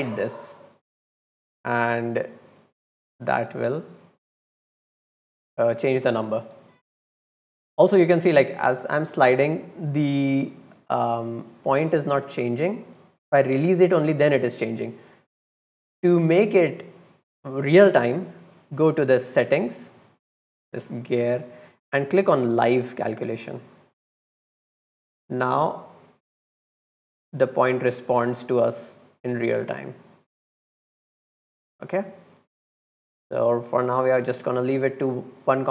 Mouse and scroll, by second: 0.9 drag, 1.6-2.0 drag, 2.5-3.3 drag, 5.0 click, 7.9-11.5 drag, 11.8 click, 12.4-12.8 drag, 13.3 drag, 20.1 click, 22.6 click, 24.0 click, 24.8-28.5 drag, 29.3-29.8 scroll down 4, 30.5-33.2 drag, 33.8 click, 34.9 middle click, 35.2 middle click, 35.5 middle click.